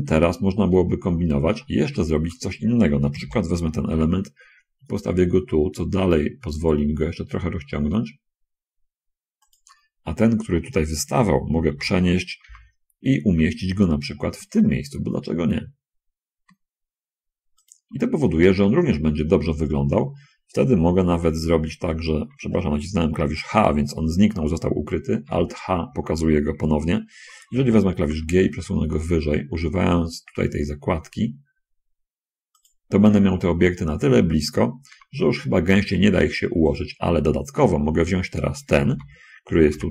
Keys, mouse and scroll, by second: 0.8-1.2 scroll down 2, 1.9 shift+middle click, 3.6 l, 12.1 l, 12.8 g, 17.9 shift+click, 21.7 h, 25.6 alt+h, 28.1 g, 32.9 click, 33.4 middle click, 35.3 g, 36.8 click, 37.5 scroll down 1, 37.7 middle click, 38.0 shift+click, 39.2 l, 39.8 g.